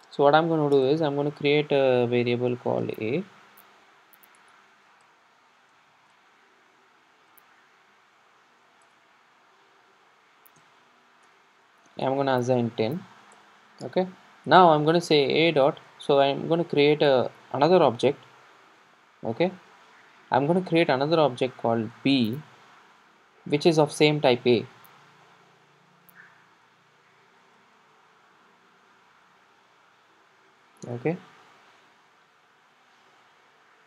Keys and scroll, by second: 4.5 Return, 8.9 Return, 16.4 Escape, 18.9 Escape, 18.9 super+d, 24.2 Escape.